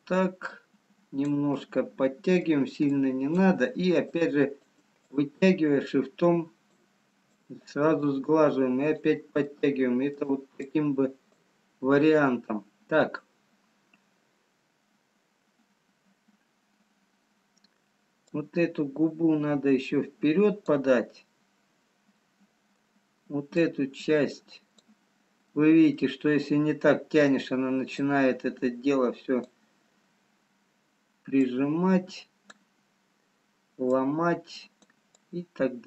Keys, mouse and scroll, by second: 1.5 middle click, 5.4 shift+click, 7.8 shift+click, 8.4 click, 9.3 middle click, 10.7 click, 16.7-17.4 scroll up 1, 17.4-18.4 scroll up 1, 18.4 click, 22.3 middle click, 23.8 click, 26.2 middle click, 28.9 click, 31.7 click, 33.3-33.8 scroll down 2, 33.8 click.